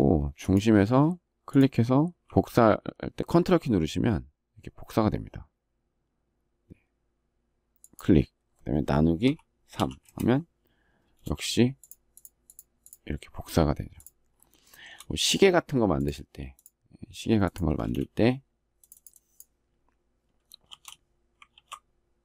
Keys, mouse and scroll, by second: 9.8 Return, 14.3 shift+middle click, 17.5 space, 20.4 shift+r, 21.2 ctrl+g.